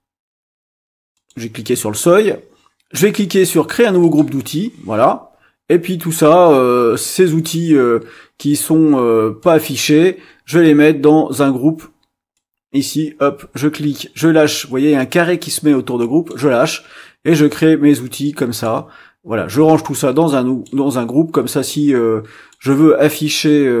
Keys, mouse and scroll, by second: 1.1 click, 4.0 click, 9.4-10.7 drag, 12.3-16.5 drag, 17.5-18.8 drag, 19.7-20.8 drag, 21.7 click.